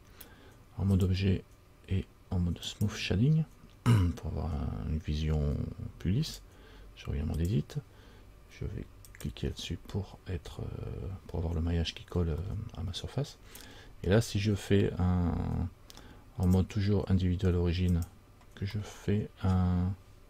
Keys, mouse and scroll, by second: 6.5 click, 7.6 click, 9.3 click, 12.6 middle click, 16.6 click, 19.0 middle click.